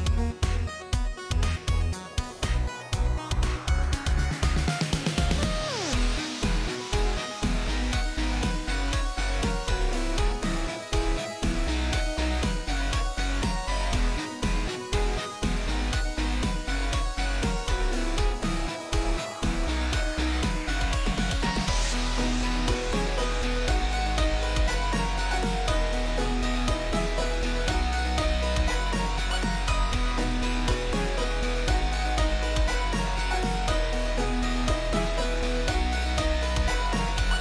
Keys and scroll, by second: 0.1-1.2 typing, 4.4-5.6 typing, 6.0 ctrl+z, 9.7-11.0 typing, 11.1 Up, 11.3 Return, 17.4-18.6 typing, 19.1 Up, 19.3 Return, 21.5 0, 31.1-32.4 typing, 35.4-36.7 typing.